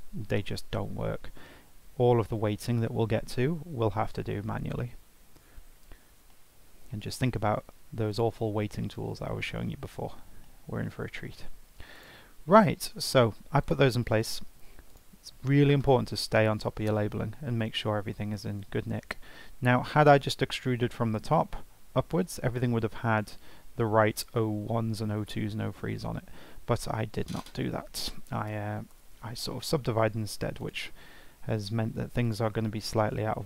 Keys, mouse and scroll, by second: 5.2-5.6 scroll up 1, 5.6 scroll down 1, 5.9-6.3 scroll up 1, 6.3-8.1 shift+middle drag, 8.1-10.4 drag, 10.4-11.9 shift+middle drag, 11.9 drag, 12.4-13.6 scroll up 1, 13.6 click, 14.3 Tab, 14.9 click, 16.1 F2, 30.6 click, 32.2 click.